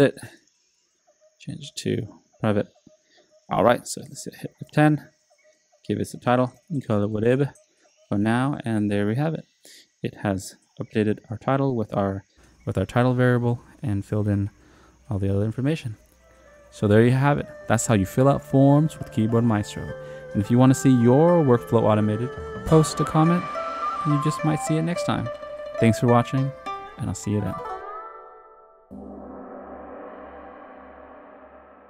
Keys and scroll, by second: 4.7 F10, 6.2-7.1 typing, 7.2 Return.